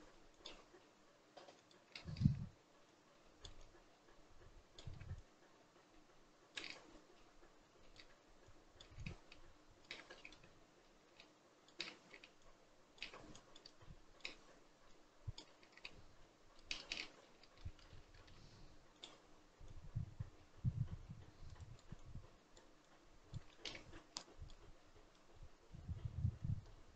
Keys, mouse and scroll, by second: 1.8 shift+middle click, 2.7-10.0 drag, 10.0-11.0 shift+middle drag, 11.0-16.7 shift+drag, 16.7 shift+middle click, 17.0 scroll up 1, 17.3 shift+middle click, 17.6-19.1 scroll up 1, 19.1-23.4 drag, 23.4 shift+middle click, 24.2-26.9 drag.